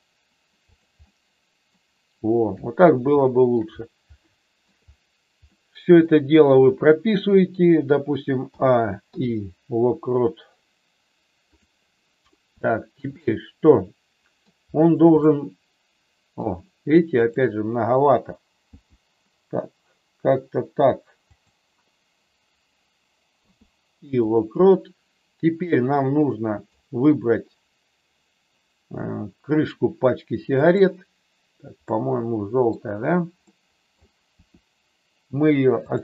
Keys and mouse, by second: 1.1 middle click, 3.3 shift+middle click, 4.2 shift+middle click, 5.6 middle click, 8.6 a, 9.1 i, 12.6 shift+middle click, 13.2-14.4 middle drag, 15.1-16.3 middle drag, 17.1 click, 18.7 g, 23.3 i, 26.0 middle click, 30.6 click, 31.8 middle click, 33.4 middle click, 34.2 r, 35.8 click.